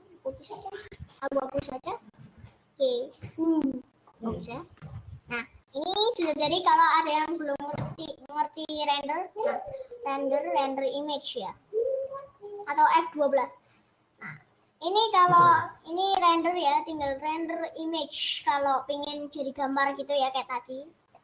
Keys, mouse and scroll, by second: 1.6-4.8 middle drag, 4.8 KP_0.